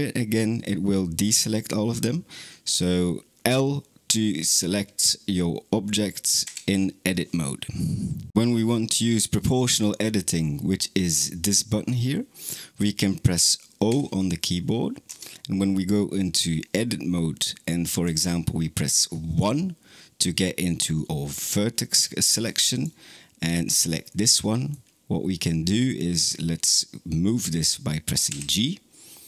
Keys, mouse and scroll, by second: 13.7 o, 14.9 Tab, 15.5-17.9 middle drag, 17.9 1, 22.6 click, 23.5-23.9 scroll up 1, 23.9-25.6 middle drag, 25.6-28.1 scroll down 1, 28.1 g.